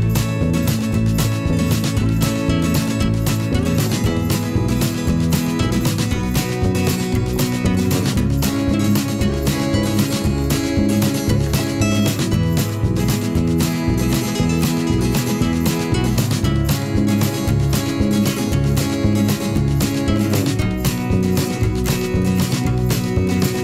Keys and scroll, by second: 0.4 ctrl+t, 4.3 Delete, 10.0 Return.